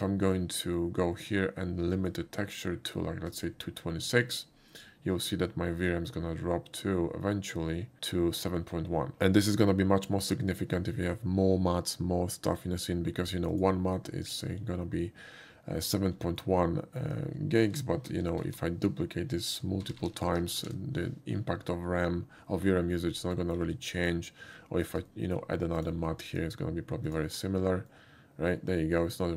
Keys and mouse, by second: 1.9 click, 3.3 click, 13.5 click, 16.4-17.0 shift+middle drag, 18.5 y, 19.5 click, 23.4 shift+middle drag, 23.9 shift+middle click, 24.6 shift+middle drag, 25.1 shift+middle drag, 25.8 shift+click, 26.3 shift+click, 27.1 shift+click, 27.9-28.5 middle drag.